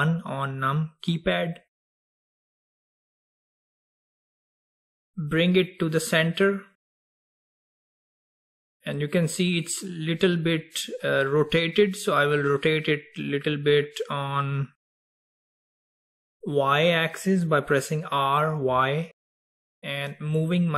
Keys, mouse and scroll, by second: 1.5 KP_1, 2.7-3.0 scroll up 1, 3.3-4.4 scroll down 2, 4.4-7.1 scroll up 2, 7.1 scroll up 1, 7.6 click, 15.9 r.